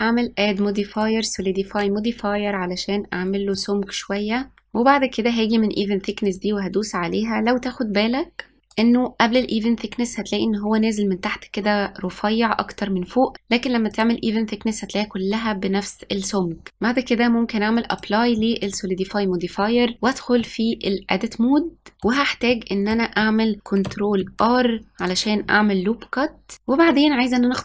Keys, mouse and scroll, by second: 2.1-4.5 drag, 4.8 click, 8.3 click, 12.8 click, 16.7-18.2 drag, 18.2 Tab, 19.3-23.0 middle drag, 23.0 ctrl+r, 26.5-27.4 scroll up 1.